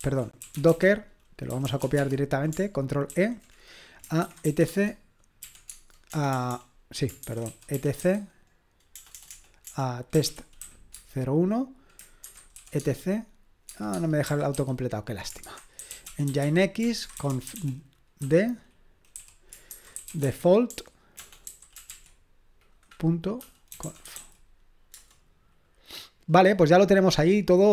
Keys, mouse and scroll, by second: 0.0 ctrl+a, 0.2-2.3 typing, 3.1 ctrl+e, 4.0-11.1 typing, 12.2-14.5 typing, 15.6-18.2 typing, 19.7-21.9 typing, 23.1-24.6 typing, 24.9 Return.